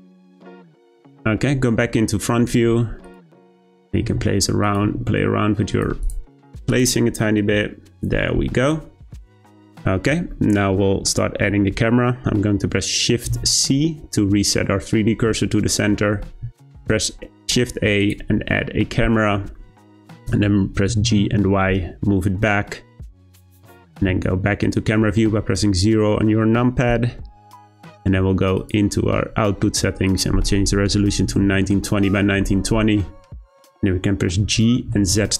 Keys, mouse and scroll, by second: 1.0-1.6 shift+middle drag, 1.6-3.0 scroll up 2, 3.0 click, 3.6 shift+click, 4.0 r, 4.8 g, 6.0 click, 6.7 click, 8.7-10.3 scroll down 1, 10.3-10.8 shift+middle drag, 10.8-13.3 scroll up 2, 13.3 shift+c, 15.7-16.4 shift+middle drag, 16.4 shift+a, 19.5-19.9 middle drag, 19.9-20.9 scroll down 2, 20.9 g, 28.5 click, 30.0-33.1 drag, 33.3-34.4 scroll down 1, 34.4 g.